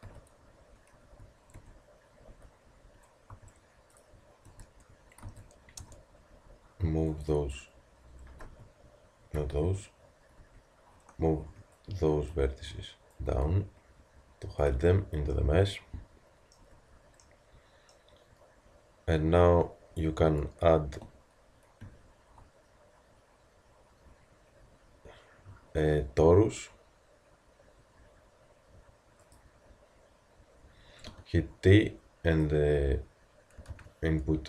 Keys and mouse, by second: 0.1 z, 1.0 a, 1.6 Tab, 2.3 z, 3.3 a, 4.1-5.8 drag, 4.5 Tab, 5.2 z, 5.8 b, 7.3 click, 8.0-9.3 drag, 9.4 z, 10.4 z, 11.5 b, 13.1 click, 14.7 z, 16.6 Tab, 21.8 shift+a, 31.1 t.